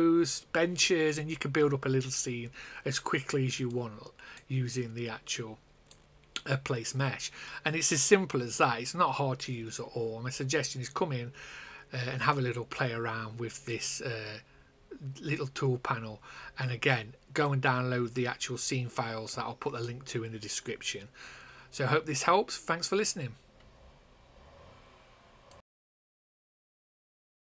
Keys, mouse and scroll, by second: 3.6 click, 5.3 click, 17.4 click, 25.4 click.